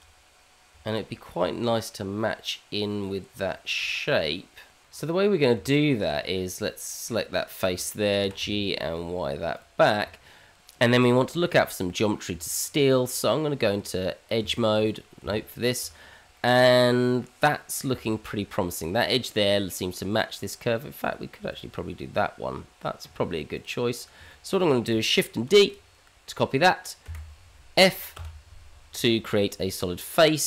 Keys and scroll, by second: 4.8 Tab, 5.5 Tab, 8.2 g, 10.0 Tab, 12.3 Tab, 14.4 Tab, 25.5 shift+d, 28.2 f.